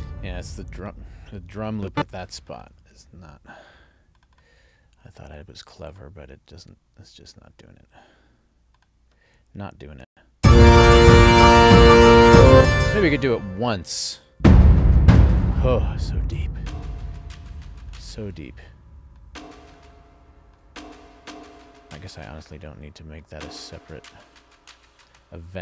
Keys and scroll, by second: 1.7 ctrl+alt+l, 10.0 space, 12.5 space.